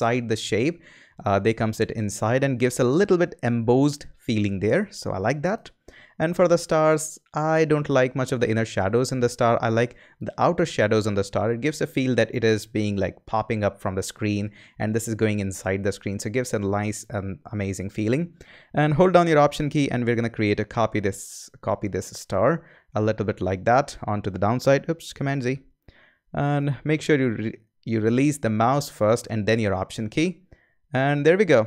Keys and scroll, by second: 24.9 super+z.